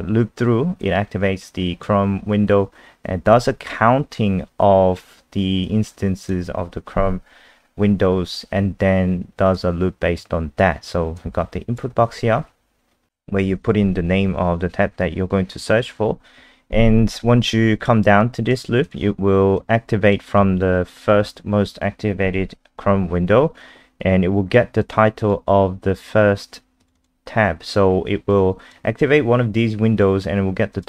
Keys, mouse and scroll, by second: 0.8 click, 3.3 scroll up 2, 5.6 click, 12.4 scroll down 1, 13.1 click, 13.1 ctrl+alt+r, 14.1 scroll down 1, 18.2 click, 26.9 click, 28.3 click.